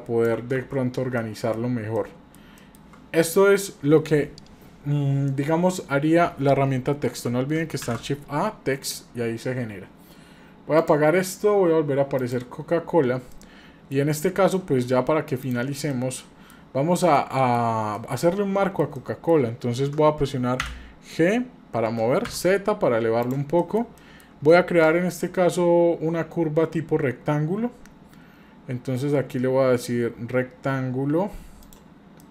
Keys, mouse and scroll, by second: 0.6 ctrl+z, 1.2 middle click, 1.6-1.9 scroll down 1, 1.9-2.3 middle drag, 2.6 shift+middle click, 7.8 shift+a, 10.8 click, 12.2 click, 13.3-13.9 middle drag, 14.5-15.1 shift+scroll up 3, 15.4 click, 15.9-16.5 middle drag, 16.8 scroll up 2, 17.1-17.6 shift+middle drag, 17.6-17.9 scroll down 1, 17.9-19.3 middle drag, 20.6 g, 23.5 scroll down 1, 23.6 middle click, 24.0 middle click, 24.7 shift+a, 32.2 middle click.